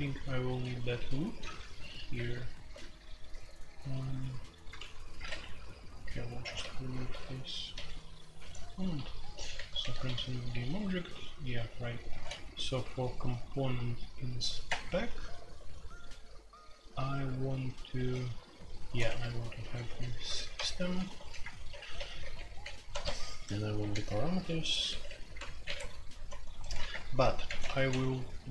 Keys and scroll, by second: 1.7-12.6 typing, 14.6 Return, 19.0 Escape, 19.1-27.9 typing, 25.6 Escape, 26.9 Return.